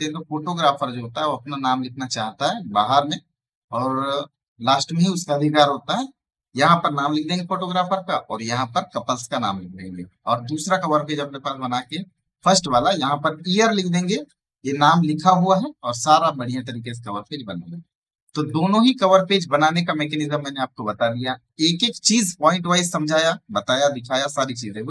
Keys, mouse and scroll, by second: 10.5 ctrl+Num_Lock, 11.5 right click, 11.7 click, 16.4 space, 16.6 right click, 16.9 click, 18.0 space, 18.1 right click, 18.3 click.